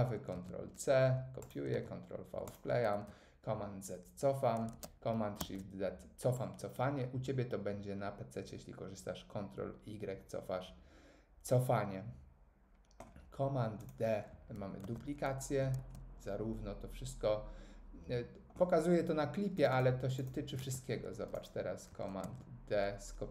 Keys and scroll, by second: 0.3 super+c, 1.7 super+v, 2.9 super+z, 5.4 shift+super+z, 14.8 super+d, 15.7 super+z, 20.6 super+f, 22.2 super+d.